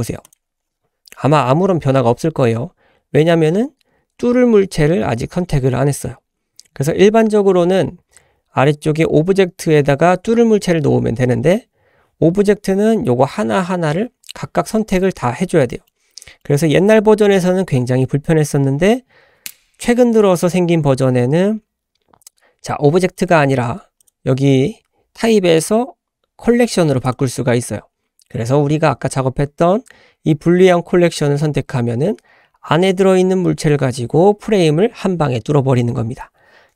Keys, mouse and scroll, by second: 3.0-4.5 scroll up 1, 4.5-6.0 scroll up 1, 7.6-9.4 scroll up 2, 15.1-15.6 scroll down 2, 15.7 shift+middle click, 16.1-16.4 middle drag, 23.2-28.6 drag.